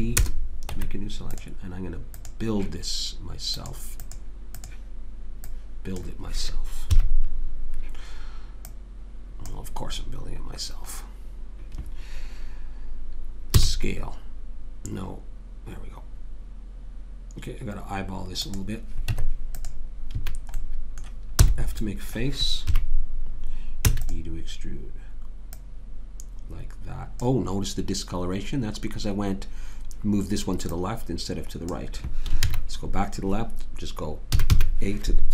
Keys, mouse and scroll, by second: 0.7 Tab, 2.1-4.0 drag, 4.1 click, 6.9 KP_3, 10.2-13.5 middle drag, 13.5 s, 19.1 Tab, 20.1 a, 21.4 f, 22.7 KP_3, 23.8 e, 25.5-27.1 drag, 30.6 click, 32.4 ctrl+z, 34.3 a, 34.5 a.